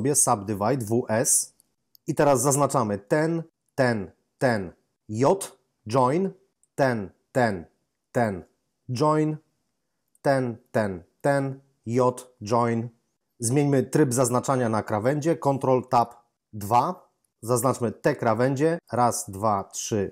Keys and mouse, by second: 0.8 w, 1.0 s, 2.9 right click, 3.5 shift+right click, 5.1 j, 6.5 right click, 6.7 shift+right click, 8.0 shift+double right click, 8.9 j, 10.0 right click, 10.3 right click, 10.5 shift+double right click, 11.9 j, 15.8 ctrl+Tab, 16.5 2, 17.6 right click, 18.1 shift+right click.